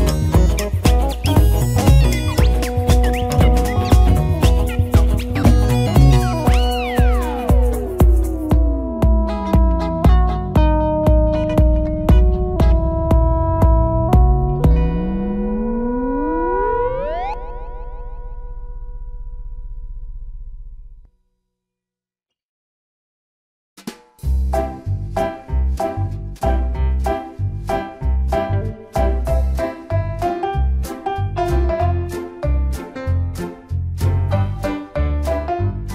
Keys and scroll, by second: 10.5 ctrl+d, 12.2 Return.